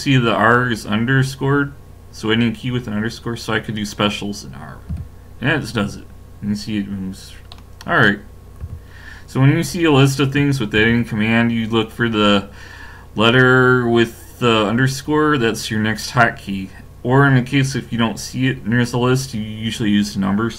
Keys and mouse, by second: 7.5 middle click, 8.6 a, 10.8 ctrl+e.